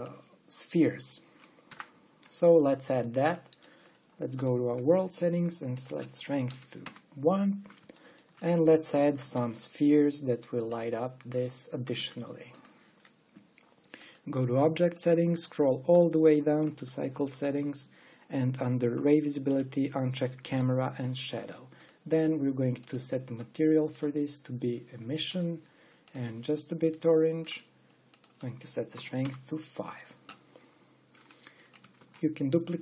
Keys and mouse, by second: 2.6 t, 4.1-5.7 middle drag, 5.1-8.2 drag, 8.6-10.1 middle drag, 10.1 click, 10.1 shift+a, 12.5 g, 14.7-16.5 drag, 16.5-17.5 middle drag, 17.5-20.3 drag, 20.8-26.3 drag, 26.4 click, 26.7-28.6 drag, 28.8-31.4 drag, 31.4-32.8 middle drag, 32.6 shift+d.